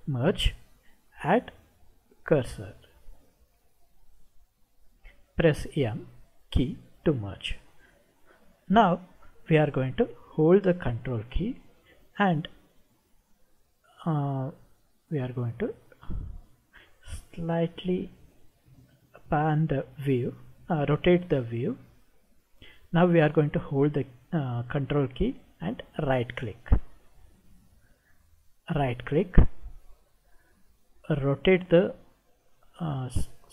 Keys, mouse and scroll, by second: 15.0-22.7 middle drag, 26.1 ctrl+right click, 28.8 ctrl+right click, 30.0-31.7 middle drag.